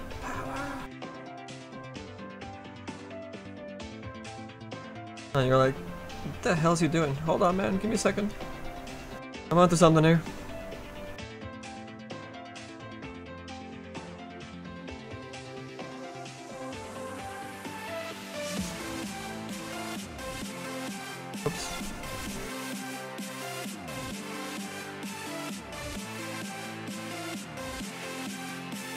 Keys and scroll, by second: 10.9 s.